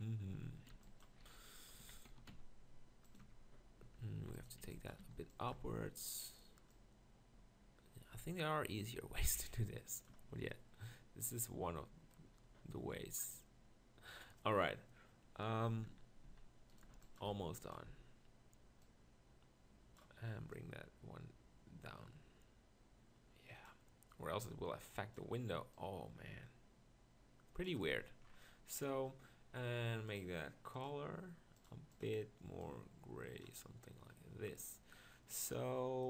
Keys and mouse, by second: 0.3-2.2 typing, 3.3 Tab, 3.9 Tab, 4.2 z, 4.6 b, 5.0 b, 5.6 z, 10.1 Tab, 10.7 middle click, 12.5 middle click, 15.8 Tab, 16.2 z, 16.9 b, 17.5 b, 17.9 z, 22.5-23.7 drag, 28.0 Tab.